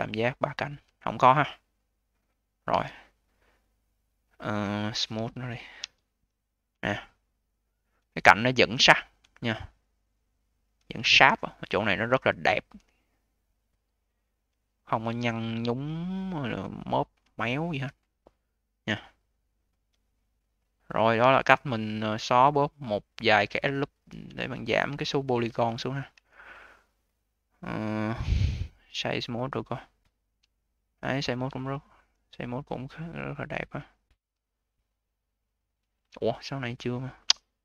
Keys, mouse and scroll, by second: 2.6 a, 4.9 q, 5.7 d, 6.1 click, 6.7-7.1 alt+middle drag, 7.1-8.0 alt+drag, 8.0-9.2 scroll up 5, 9.2-10.8 alt+drag, 10.8-11.7 scroll up 5, 11.7-12.1 scroll up 2, 12.1-14.6 alt+drag, 14.6-15.3 scroll down 8, 15.3-16.6 alt+middle drag, 16.6-17.2 alt+drag, 17.2-17.9 scroll up 10, 17.9-19.0 alt+drag, 19.0-19.9 scroll down 13, 19.9-21.1 alt+middle drag, 21.1-21.5 scroll down 4, 21.5-22.0 alt+middle drag, 22.0-24.0 alt+drag, 24.0 scroll down 3, 24.3-24.8 alt+middle drag, 24.8-25.6 alt+drag, 25.6-26.0 scroll up 2, 26.0 a, 28.7-30.4 right drag, 30.4-31.1 alt+drag, 31.5-32.3 alt+drag, 32.7-33.9 right drag, 33.9-34.3 scroll up 4, 34.3-35.3 alt+drag, 35.3 alt+middle click, 36.2 click, 36.9-37.6 right drag.